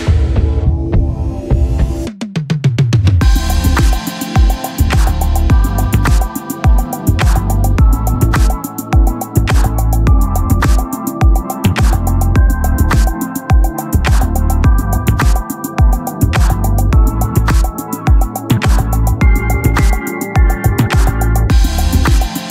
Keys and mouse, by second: 7.9 click, 9.7 click, 12.3 click, 14.7 click, 19.3 click, 21.7 click.